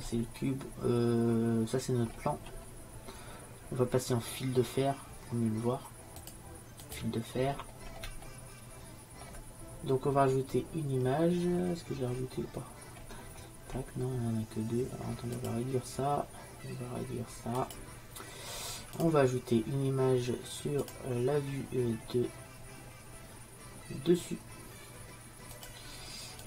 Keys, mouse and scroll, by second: 1.0-4.6 middle drag, 6.3-8.3 drag, 10.2-11.6 scroll down 1, 11.6-15.4 middle drag, 15.4-17.4 drag, 17.6-22.8 drag.